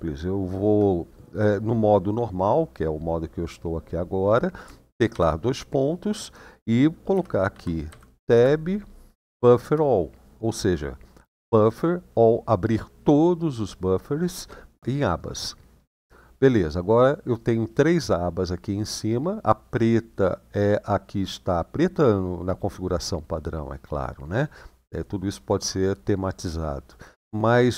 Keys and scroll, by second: 4.9 typing, 6.8-9.6 typing, 16.0 Return.